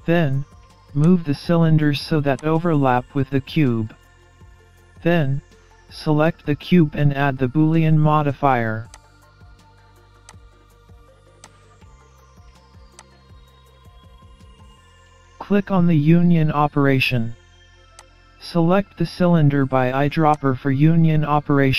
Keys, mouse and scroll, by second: 1.0 click, 2.4 click, 5.0-5.6 scroll up 2, 5.6 middle click, 8.9 click, 10.3 click, 11.4 click, 15.7 scroll up 1, 18.0 click, 20.3 click.